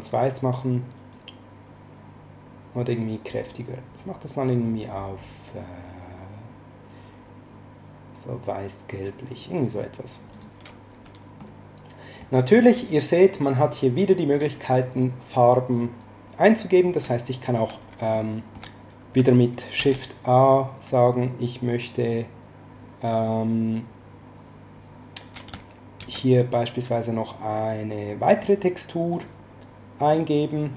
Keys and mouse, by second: 1.1 click, 10.3 click, 11.4 shift+middle click, 18.1 shift+middle click, 19.7 shift+a, 26.0 shift+a, 29.1 click.